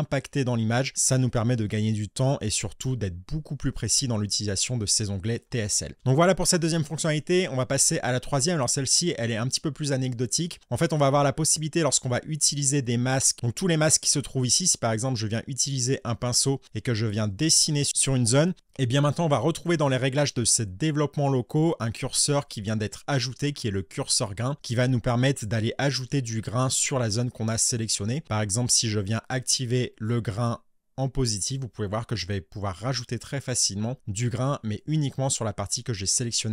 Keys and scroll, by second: 5.9 ctrl+z, 24.5 space.